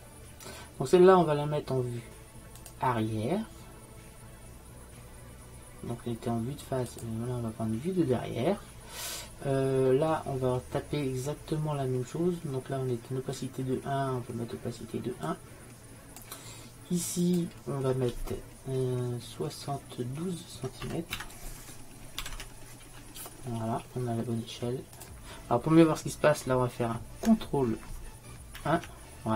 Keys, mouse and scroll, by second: 0.0-4.6 drag, 9.7-14.4 middle drag, 15.3-19.1 drag, 28.6 ctrl+n.